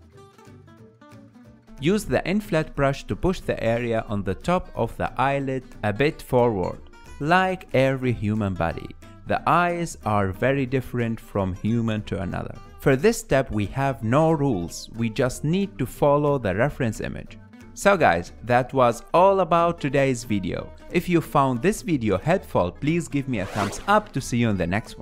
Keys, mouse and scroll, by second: 1.0 click, 1.4 ctrl+middle click, 2.3 f, 3.3 f, 4.0-7.1 drag, 7.1 ctrl+middle click, 7.4 click, 7.7 middle click, 7.8 click, 8.1 middle click, 8.2 click, 8.3 ctrl+middle click, 8.6-9.7 drag, 9.7 middle click, 9.7 shift+click, 10.0 middle click, 10.2 click, 10.7 middle click, 10.9 f, 11.1 click, 11.8 ctrl+middle click, 11.9 f, 12.0 shift+click, 12.0 middle click, 12.2 ctrl+z, 12.2 shift+click, 12.9 ctrl+middle click, 13.1 ctrl+z, 13.2 ctrl+z, 13.2 click, 13.5 ctrl+middle click, 13.7 ctrl+z, 13.8 f, 13.9 click, 14.5 f, 14.6 shift+click, 15.5 shift+middle click, 15.6 shift+click, 15.7 ctrl+middle click, 16.2 KP_1, 16.7 ctrl+middle click, 17.4-18.4 drag, 18.4 ctrl+middle click, 19.1 middle click, 19.3 click, 19.6 ctrl+middle click, 19.7 shift+click, 20.5 middle click, 21.0 ctrl+middle click, 21.2 click, 21.8 ctrl+middle click, 21.9 f, 22.0 shift+click, 22.4 ctrl+shift+middle click, 22.6 KP_Decimal, 22.7 shift+middle click, 22.8 shift+click, 22.9 shift+middle click, 23.3 shift+click, 23.7 click, 24.1 ctrl+middle click, 24.7 KP_1.